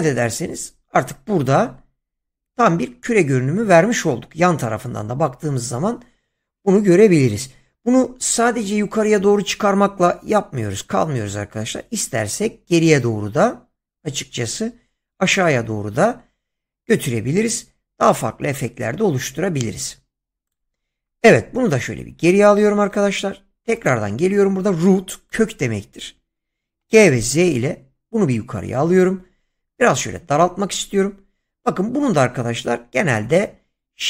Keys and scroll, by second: 22.0 ctrl+z, 26.7 g, 27.4 z.